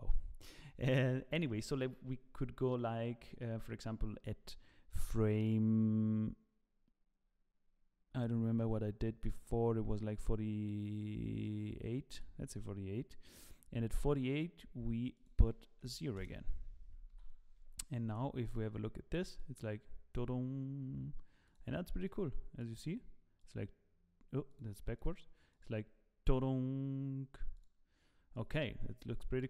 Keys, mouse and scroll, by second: 0.3 scroll up 1, 0.5 middle click, 1.4 click, 15.1 click, 17.1 i, 18.5 click, 19.3 click, 21.6 click, 24.6 click, 28.3 click.